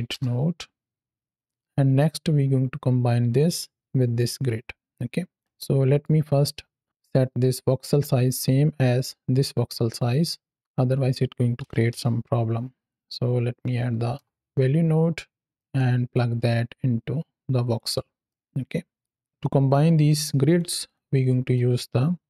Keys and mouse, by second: 1.8-5.3 drag, 5.4 middle click, 6.8 middle click, 10.5 click, 15.5 middle click, 16.0-17.6 drag, 18.2-18.9 middle drag, 19.3-20.4 drag, 21.2 click.